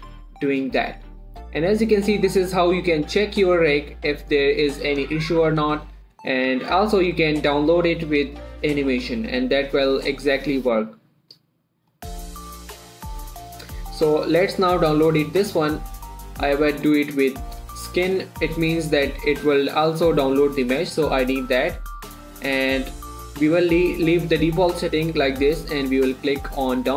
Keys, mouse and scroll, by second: 0.8-5.7 drag, 5.7 scroll down 1, 9.3 click, 12.1 click, 12.6-13.2 scroll up 1, 13.3-15.3 drag, 21.7 click.